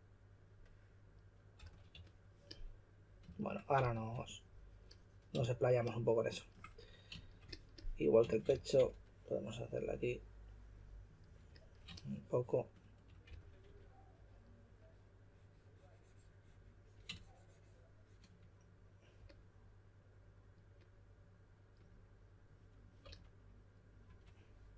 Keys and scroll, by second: 1.5-1.9 typing, 3.5-4.6 typing, 8.2-9.2 typing, 13.0-14.1 typing, 23.0-24.5 typing.